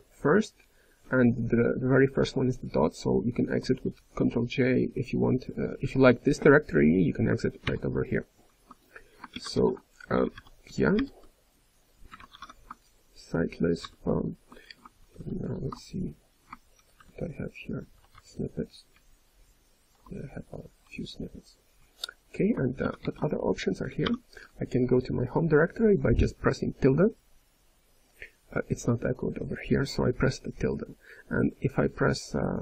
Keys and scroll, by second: 0.1-0.8 ctrl+n, 1.2-1.8 ctrl+p, 4.5-5.2 typing, 7.6 ctrl+j, 9.5 ctrl+f, 10.2 BackSpace, 13.8 ctrl+j, 14.9 ctrl+n, 17.9-18.6 typing, 23.0 ctrl+n, 23.0 Return, 23.0 ctrl+f, 23.0 k.